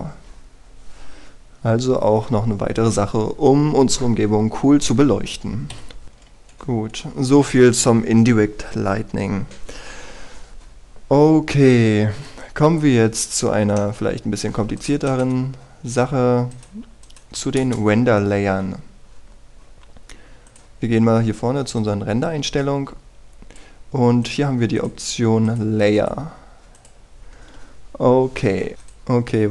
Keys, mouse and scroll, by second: 0.2-2.4 scroll up 1, 6.0 Return, 6.7-8.4 scroll up 1, 8.4-8.9 scroll down 1, 14.8 middle click, 15.9 right click, 16.9-17.3 scroll down 1, 17.3-17.6 scroll up 1, 17.6 right click, 18.5 Delete, 18.7 Return, 19.0 scroll up 1, 19.7-20.8 scroll down 1, 20.8-21.5 scroll up 1, 21.5-25.1 drag, 29.3 F9.